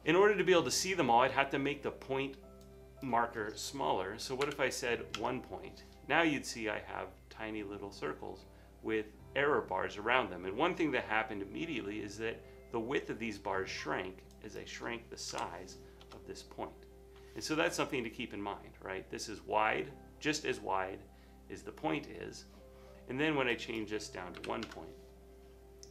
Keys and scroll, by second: 4.5 1, 5.2 Return, 15.4 typing, 16.0 Return, 24.5 typing.